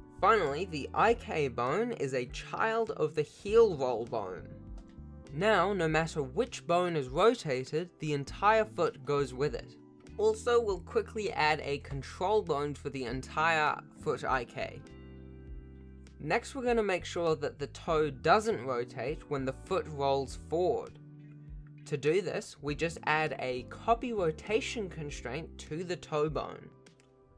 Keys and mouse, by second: 0.0 r, 1.2 Tab, 2.1 shift+click, 2.9 ctrl+p, 3.7 alt+a, 4.1 ctrl+Tab, 4.2 r, 7.3 drag, 7.6 r, 9.6 click, 10.2 ctrl+Tab, 11.6 shift+click, 12.2 shift+s, 12.9 shift+a, 13.9 click, 14.4 s, 15.7 s, 16.4 g, 18.4 g, 18.5 r, 22.5 click, 22.8 shift+click.